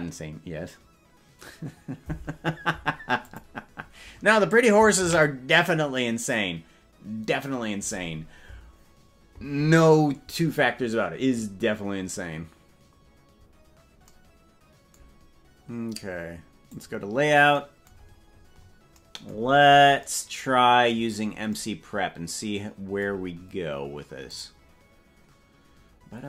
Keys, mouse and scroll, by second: 8.4 ctrl+s, 16.9 click, 18.0-18.9 scroll down 15, 19.5-20.1 scroll down 3, 20.9-21.7 scroll up 10, 24.3 click, 26.1 scroll up 1.